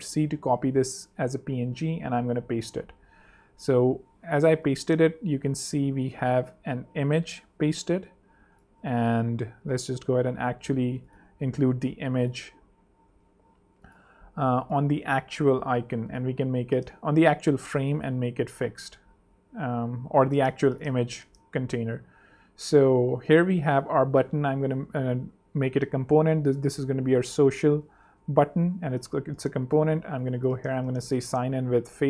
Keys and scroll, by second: 1.7 super+v, 4.5 z, 5.3 shift+z, 11.3 BackSpace, 12.0 super+BackSpace, 12.5 super+v, 17.2 Escape, 20.6 z, 21.1 super+z, 21.2 super+3, 23.0 super+2, 24.5 alt+super+k, 24.9 alt+super+l, 25.5 alt+super+r, 25.8 shift+super+f, 26.2-29.0 typing, 29.9 super+x, 31.2-32.0 typing.